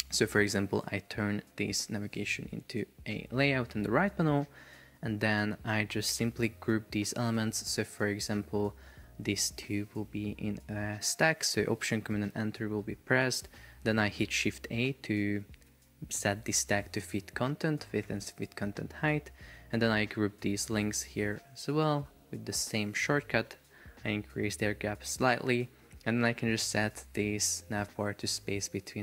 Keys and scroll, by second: 12.2 alt+super+Return, 14.6 shift+a, 15.8 shift+super+4, 18.1 Escape, 22.0 alt+super+Return, 22.6 shift+a, 24.1 shift+Up.